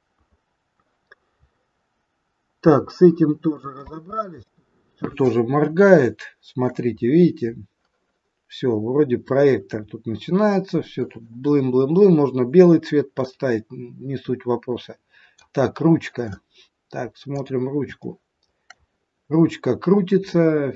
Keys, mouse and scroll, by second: 1.3-1.7 scroll up 5, 2.4 scroll down 1, 2.8 middle click, 3.7 space, 5.6 shift+scroll up 1, 5.7 shift+middle click, 7.0 scroll up 3, 10.1 scroll down 2, 13.4 middle click, 15.6-17.3 scroll up 4, 17.3 click, 18.0 shift+middle click, 20.3-20.7 scroll down 3.